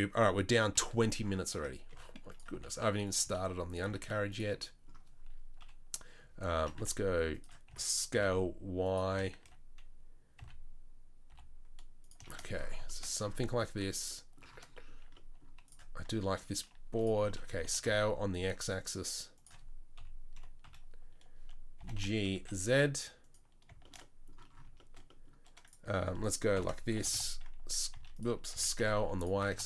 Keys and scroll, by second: 0.7 KP_3, 1.5 Tab, 1.9 s, 2.5 g, 3.2 s, 3.8 g, 5.6 KP_3, 6.6 s, 7.7 s, 9.1 g, 16.9 3, 17.6 s, 20.0 KP_3, 20.4 KP_1, 20.6 KP_3, 21.8 g, 26.6 ctrl+l, 27.0 g, 28.5 s, 29.3 g.